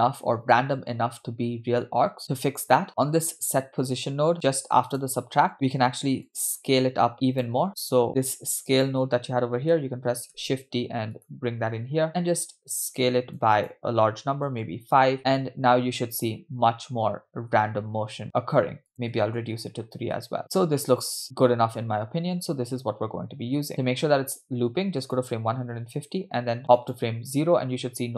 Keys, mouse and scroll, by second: 0.1 space, 1.9-2.5 scroll down 4, 2.2 middle click, 4.9 click, 5.3-5.7 scroll down 4, 5.5 middle click, 6.3-7.5 drag, 12.1-14.8 drag, 12.1 shift+d, 15.8 space, 18.9 click, 20.4 space, 25.1 click, 26.9 click.